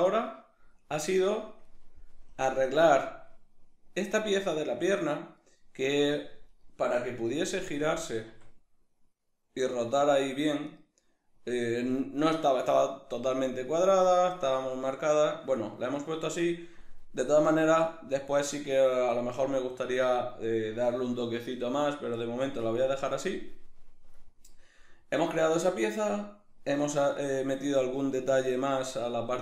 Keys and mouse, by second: 1.7-2.4 right drag, 2.4 KP_Decimal, 2.7-6.5 middle drag, 6.5 right click, 7.8-10.8 drag, 8.4 r, 10.8 right click, 15.8 middle click, 17.7-29.4 middle drag, 27.1 right click.